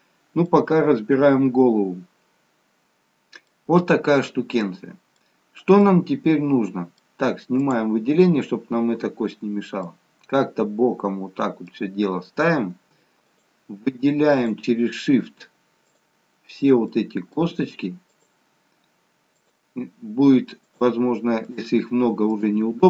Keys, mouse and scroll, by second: 0.2-1.2 scroll up 2, 0.6 middle click, 4.7 scroll down 1, 4.8 middle click, 5.5-6.6 scroll up 3, 5.9 middle click, 7.7 click, 9.1-9.7 scroll down 1, 9.7-10.1 scroll up 1, 10.1 middle click, 13.4 shift+click, 17.0 middle click, 18.4 shift+click.